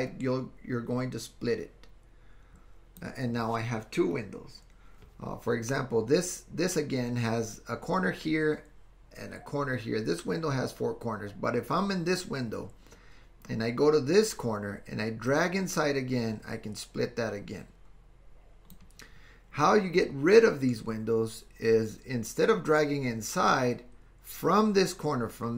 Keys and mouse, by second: 15.3-18.8 drag.